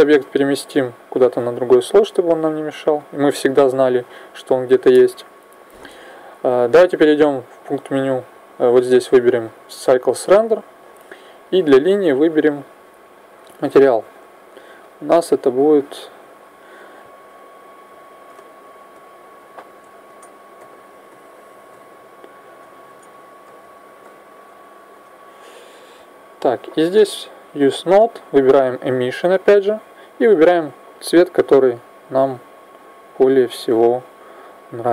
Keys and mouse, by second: 0.1 m, 7.1-9.1 drag, 10.3-11.4 middle drag, 11.4 right click, 13.2-17.5 drag, 26.8-31.7 drag.